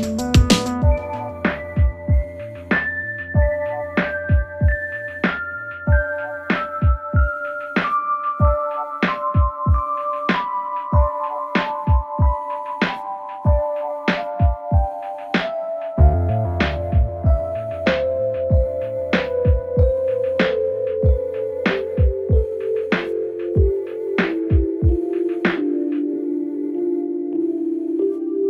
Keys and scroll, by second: 9.7 F1, 13.5 4, 13.9 F1, 14.8 1, 15.0 Return, 16.4 1, 19.3 F1, 20.0 4, 21.2 ctrl+z, 22.0 3, 23.2 Delete.